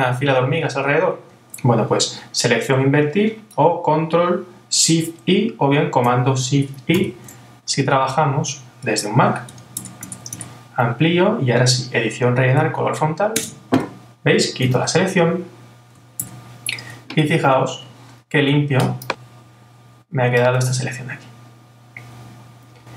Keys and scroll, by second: 7.0 shift+super+i, 9.5 super++, 14.8 super+d.